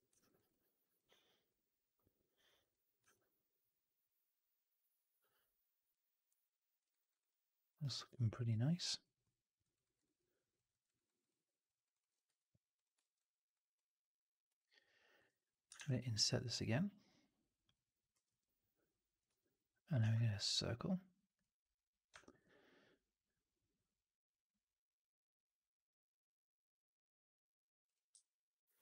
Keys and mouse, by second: 0.0 right drag, 0.2 right drag, 0.4-0.8 drag, 2.8 click, 3.0-6.7 alt+drag, 6.8 alt+right drag, 7.0 alt+right drag, 7.2-7.6 alt+drag, 7.7 alt+right drag, 8.0 alt+right drag, 8.2 alt+right drag, 8.4 alt+click, 9.1 alt+middle click, 9.6 alt+right click, 9.8 alt+right drag, 10.0-10.4 alt+drag, 10.6 alt+middle drag, 10.7 alt+right drag, 10.9 alt+right drag, 11.2 alt+click, 11.7 alt+right drag, 11.9 alt+click, 12.3 3, 12.6 click, 12.9 middle click, 13.0 right click, 13.6-15.1 drag, 15.6 shift+Tab, 18.0 r, 18.8-19.8 middle drag, 19.3 w, 19.9 shift+Tab, 22.1 alt+right click, 22.3-27.7 alt+drag.